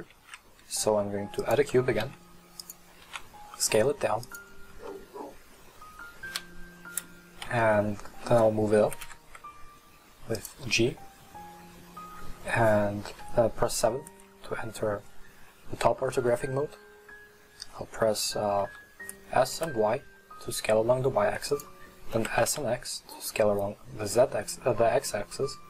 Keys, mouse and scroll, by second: 0.1 shift+a, 2.1 s, 3.2 s, 5.0-6.3 middle drag, 6.3 KP_1, 7.6-8.9 shift+middle drag, 8.9 g, 10.9-13.1 scroll up 2, 13.2 KP_7, 18.7 s, 22.3 s.